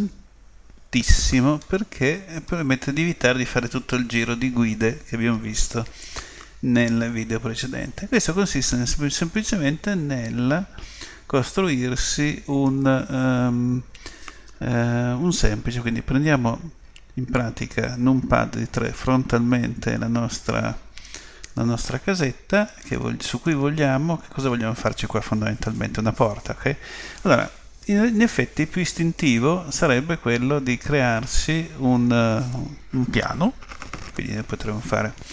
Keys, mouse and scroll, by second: 1.6-14.3 middle drag, 16.7 KP_3, 19.5 KP_5, 22.8-24.7 middle drag.